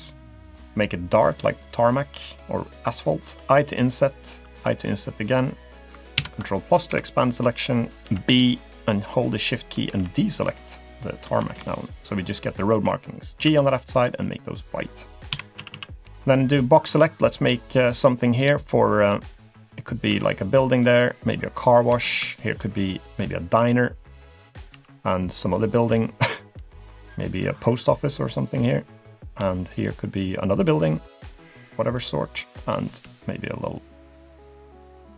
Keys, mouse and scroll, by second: 1.1 g, 2.6 middle click, 3.4 i, 4.4 i, 6.2 ctrl+KP_Add, 6.9 KP_7, 7.6-8.0 scroll down 2, 8.0 b, 9.9 b, 11.4 b, 13.5 g, 14.6 middle click, 15.3 KP_7, 15.6 a, 15.7 a, 16.0 b, 20.1 b, 21.9 b, 24.7 b, 26.6 b, 29.4 b, 33.0 b.